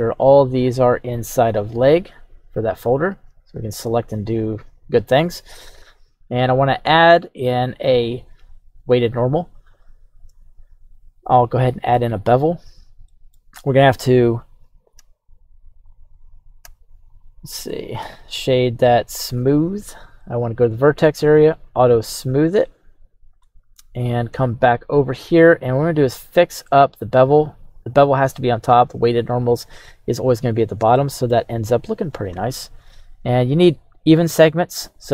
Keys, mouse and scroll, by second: 3.0 click, 4.1-4.7 scroll up 1, 4.7 right click, 5.5-6.0 scroll up 1, 7.0 click, 7.6-9.0 drag, 10.3-11.6 drag, 12.4-13.1 scroll up 3, 13.1 middle click, 15.0 a, 15.8 right click, 16.6 a, 17.1 right click, 18.0 q, 20.4 click, 21.4 click, 22.9 right click, 24.5 click, 27.7-28.4 drag, 30.5 scroll up 1, 30.9-31.3 shift+middle drag, 31.5-32.4 scroll up 1, 33.7 click.